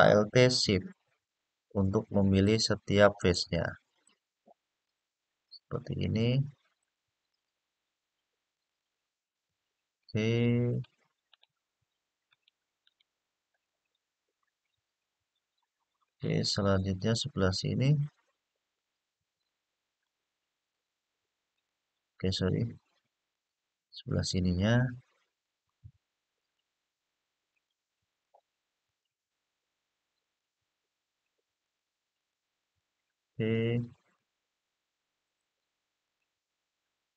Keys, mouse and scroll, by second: 1.0 alt+shift+click, 2.2 alt+shift+click, 2.9 alt+shift+click, 3.7 alt+shift+click, 4.6 alt+shift+click, 5.2 alt+shift+click, 6.5 alt+shift+click, 7.0 alt+shift+click, 8.3 alt+shift+click, 8.5 alt+shift+click, 9.1 alt+shift+click, 10.4 alt+shift+click, 11.1 alt+shift+click, 12.0 alt+shift+click, 12.6 alt+shift+click, 14.5-14.8 scroll down 2, 15.4 scroll down 1, 16.4-19.1 middle drag, 20.4 alt+shift+click, 21.2 alt+shift+click, 23.0 alt+shift+click, 23.8-24.7 scroll up 4, 24.7 scroll down 1, 26.1 alt+shift+click, 27.2 alt+shift+click, 27.8 alt+shift+click, 28.6 alt+shift+click, 29.9 alt+shift+click, 31.3 alt+shift+click, 31.9 alt+shift+click, 32.7-33.3 scroll down 1, 33.4-33.9 scroll up 1, 35.1 alt+shift+click, 35.8 alt+shift+click.